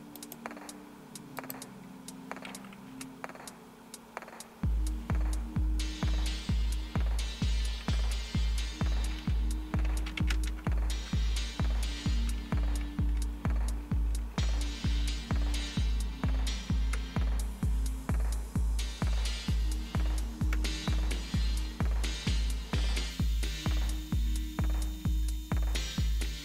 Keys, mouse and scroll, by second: 0.2 right click, 1.4 click, 2.8 Left, 7.8 ctrl+a, 9.6-10.6 typing, 11.9 Right, 12.2 Right, 12.3 Right, 13.6-15.2 typing, 16.9 BackSpace, 17.1 BackSpace, 20.5 Return.